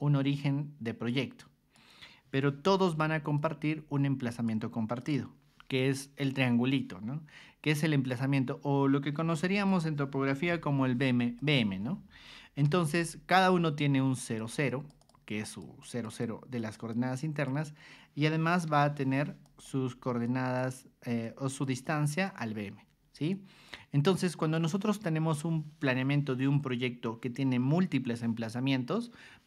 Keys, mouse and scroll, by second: 0.8 click, 1.4 click, 2.6 y, 3.3-4.4 drag, 5.0 click, 9.2-11.0 typing, 9.7 click, 11.4 click, 12.6 r, 14.1 click, 14.7 click, 15.0 click, 15.4 click, 15.8 click, 16.1 click, 16.6 click, 16.9 click, 18.7 p, 19.4 click, 20.2 click, 21.2 click, 21.8 click, 23.3 click, 24.3 click.